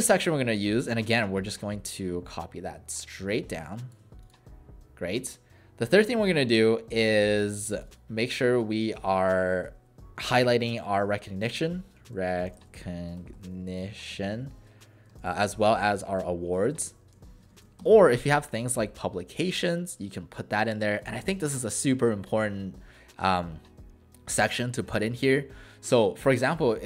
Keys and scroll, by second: 8.6 ctrl+a, 10.6-15.1 typing, 16.8-18.4 typing, 26.6 ctrl+a.